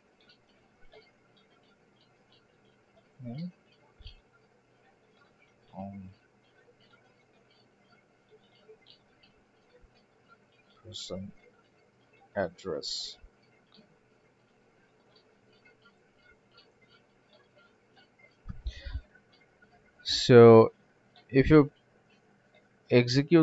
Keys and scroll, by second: 10.6 alt+4, 14.8 alt+4.